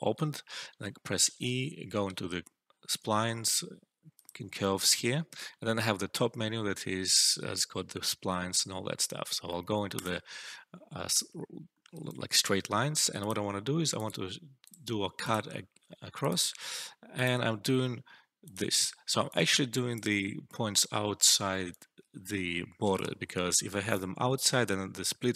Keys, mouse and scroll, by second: 1.2 e, 4.0 click, 5.3 alt+middle click, 9.9 click, 11.6 alt+middle click, 11.8 alt+right click, 13.1 click, 15.6 typing, 19.2-20.3 alt+click, 20.0 alt+middle click, 21.6 click, 21.7-22.9 alt+drag.